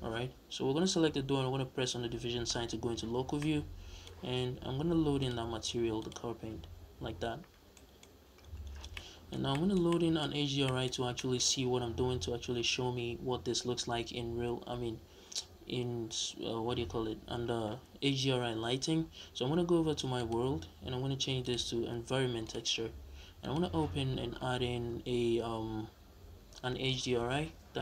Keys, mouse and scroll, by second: 2.0 KP_Divide, 4.9-7.5 drag, 6.5 scroll down 1, 6.7-7.1 scroll up 1, 7.3 scroll down 1, 7.5-19.9 middle drag, 7.8-8.2 scroll up 1, 19.9 click, 21.2-23.4 drag.